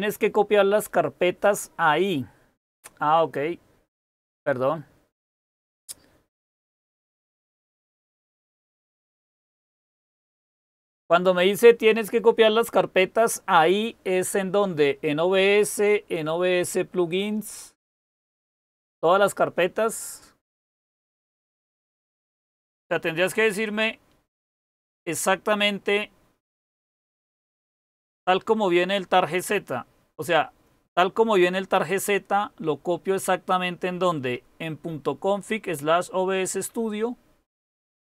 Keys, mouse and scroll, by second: 37.5-38.0 typing.